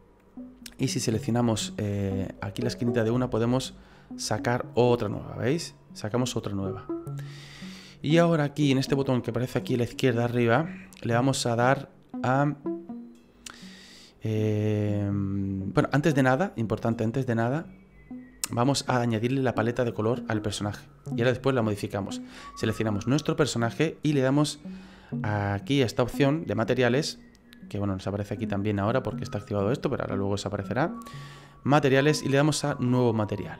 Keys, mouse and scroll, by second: 3.0 click, 10.3 click, 22.3 right click, 30.9 click, 32.7 click.